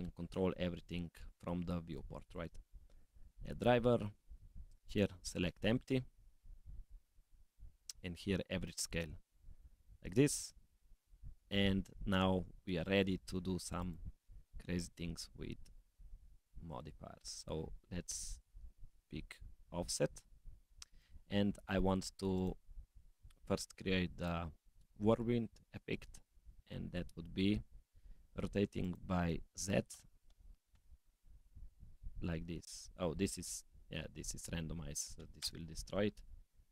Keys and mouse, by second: 12.8-13.2 drag, 13.8-21.2 drag, 22.4 click, 24.0 click, 28.8-32.3 drag, 33.4-35.5 drag, 36.6-36.7 drag.